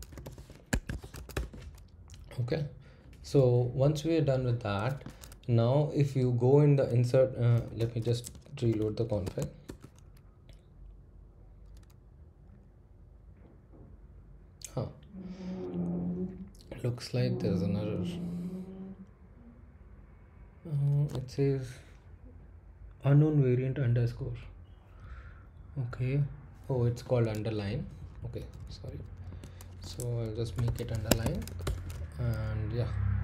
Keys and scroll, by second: 0.0-0.1 typing, 6.2 Up, 7.6-9.2 typing, 9.2 Tab, 9.6 Return, 27.1 Down, 27.7 Left, 28.0 Left, 28.2 Left, 28.4 Left, 28.6 Left, 28.8 w, 30.1-32.1 typing.